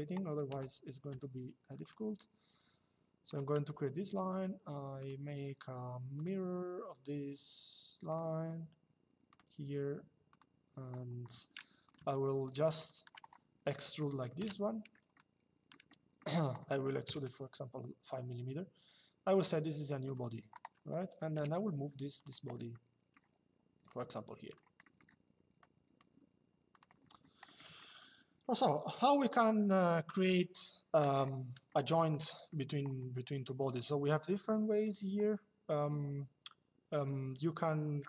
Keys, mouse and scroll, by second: 3.0 click, 3.3 Escape, 4.7 click, 5.8 click, 7.8 click, 9.0 click, 11.5 click, 13.5 middle click, 14.1 e, 14.9 shift+middle click, 16.8 KP_5, 19.8 click, 21.9 click, 22.4 shift+middle click, 23.6 click, 24.5 middle click, 26.4 click, 32.2 middle click, 34.5 click.